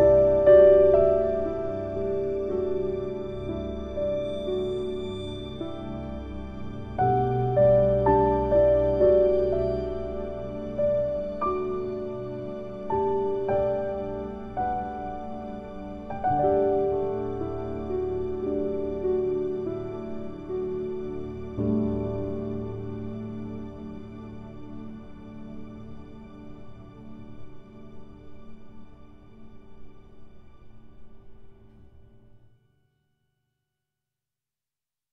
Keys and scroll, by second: 16.2 ctrl+k, 17.5 ctrl+u, 19.9 ctrl+z, 24.2 ctrl+Home.